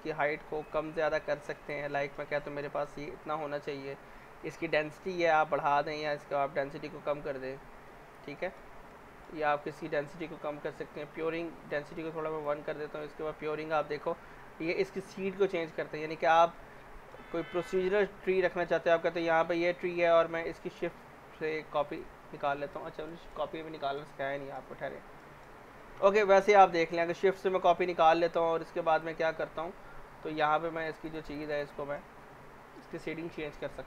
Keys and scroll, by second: 18.6 w.